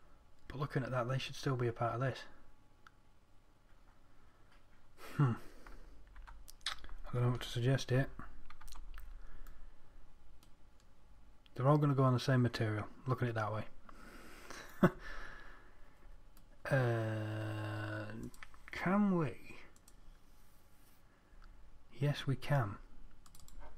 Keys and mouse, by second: 6.6 Tab, 9.1 z, 9.8-12.3 middle drag, 15.3-19.0 middle drag.